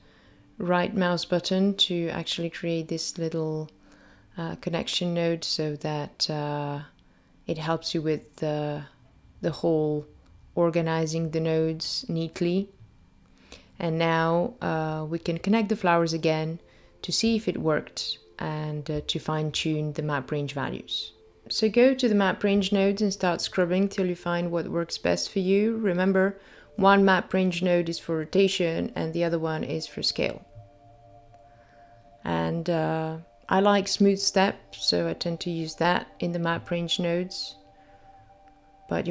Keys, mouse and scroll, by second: 0.1 g, 3.4 click, 4.5 click, 5.4 middle click, 8.8 middle click, 10.7 middle click, 14.8 click, 15.1 click, 17.7 click, 21.4 click, 23.0 click, 24.6 click, 25.7 click, 26.8 click, 29.2 click, 29.8 click, 31.1 click, 31.7 middle click, 32.2-32.5 scroll up 3, 32.6 middle click, 34.6 click, 35.4 KP_2, 36.0 click, 37.1 click.